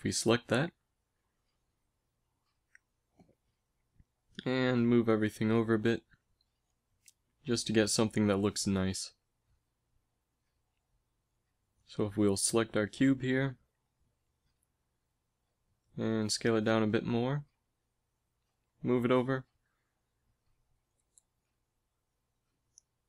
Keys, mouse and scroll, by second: 1.1 KP_1, 2.9 z, 4.1 a, 4.2 a, 4.8 g, 8.9 g, 11.3 a, 11.8 z, 14.3 l, 14.3 KP_1, 14.7 z, 16.5 s, 19.0 g, 20.5 g, 22.4 s.